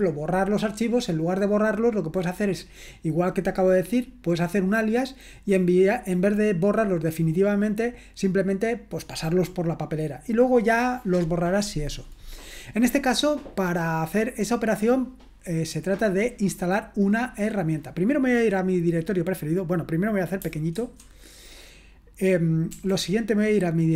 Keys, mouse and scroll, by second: 20.7 ctrl+1, 22.7 BackSpace.